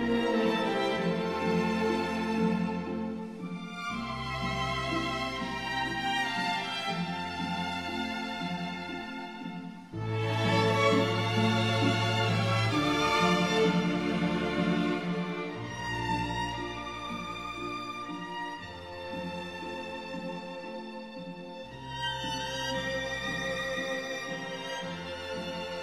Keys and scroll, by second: 2.5 ctrl+z, 3.4 ctrl+z, 11.9 ctrl+z, 13.5 ctrl+z, 17.6 ctrl+z, 18.1 ctrl+z, 23.0 ctrl+z, 24.5 ctrl+z.